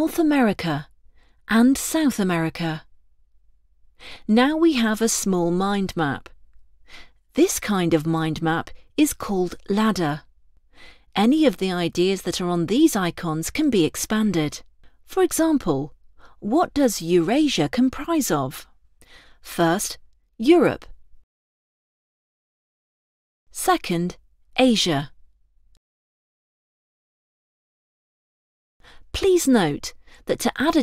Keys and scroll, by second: 20.4 ctrl+Return, 24.4 ctrl+Return.